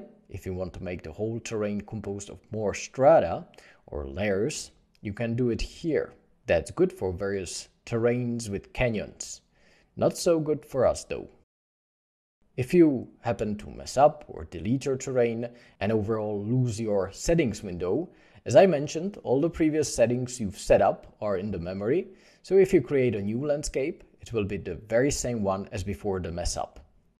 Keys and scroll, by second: 19.5 ctrl+s, 20.1 shift+a.